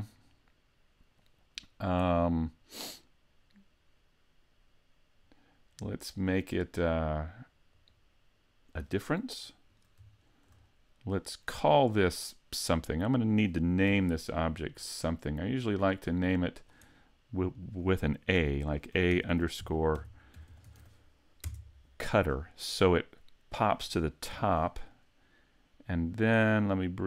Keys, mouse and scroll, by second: 6.1 click, 9.7 right click, 10.7 middle click, 14.0 n, 15.5 click, 17.6 click, 20.5 t, 24.3 n, 24.9 middle click.